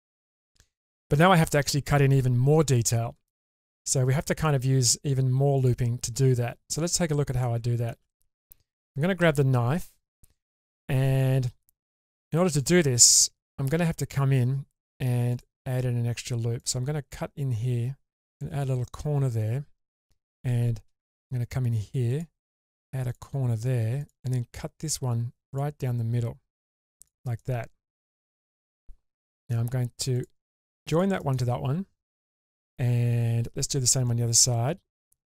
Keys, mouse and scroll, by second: 0.4-0.8 middle drag, 1.4-3.4 scroll up 2, 3.7-4.2 middle drag, 4.4-4.9 shift+middle drag, 5.6 click, 7.0 scroll up 2, 7.4 shift+middle click, 9.2 k.